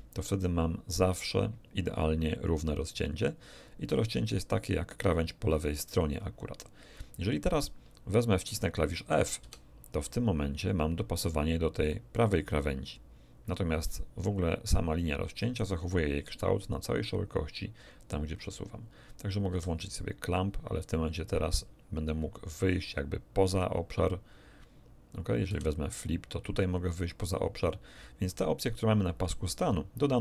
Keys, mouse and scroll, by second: 9.4 f, 19.5 c, 25.5 f.